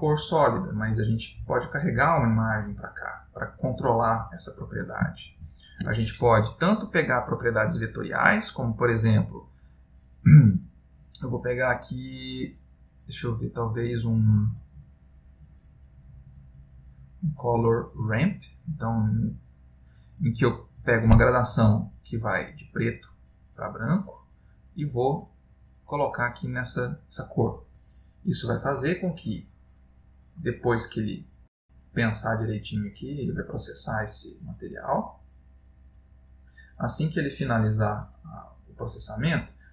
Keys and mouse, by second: 5.4 shift+a, 21.4 typing, 22.2 click, 23.9 click, 26.2 click.